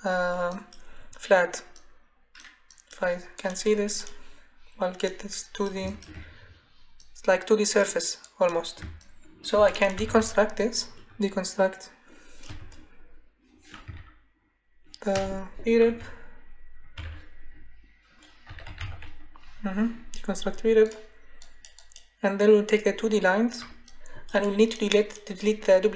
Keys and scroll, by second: 9.7-10.6 typing, 12.5 BackSpace, 13.9 r, 15.1 BackSpace, 15.9 e, 17.0 c, 18.2-19.3 typing.